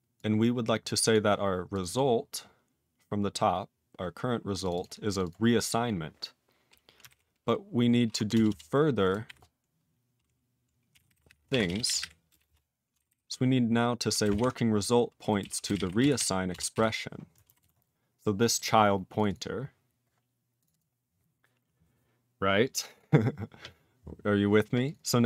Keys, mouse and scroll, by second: 0.1 click, 1.1 click, 1.7 click, 1.8 click, 1.8 double click, 1.9 double click, 2.7-3.2 scroll up 6, 3.7-4.6 scroll down 11, 4.6 click, 4.7 click, 4.7 double click, 4.8 double click, 5.1 click, 5.1 click, 5.2 double click, 5.3 double click, 5.6 click, 5.7 click, 5.9 scroll down 3, 7.1 ctrl+n, 8.3 Return, 8.5 Return, 9.2 *, 10.7-12.9 typing, 13.0 alt+b, 13.1 alt+b, 14.2-17.2 typing, 14.3 ctrl+e, 17.7 ctrl+s, 18.4 click, 18.4 click, 18.5 double click, 18.5 double click, 19.1 click, 19.2 click, 19.2 double click, 19.3 double click, 20.6 click, 20.6 click, 20.7 double click, 20.8 double click, 22.9 click, 22.9 click, 23.5 click, 23.7 scroll down 1, 24.8 click, 24.9 click, 24.9 double click, 25.0 double click.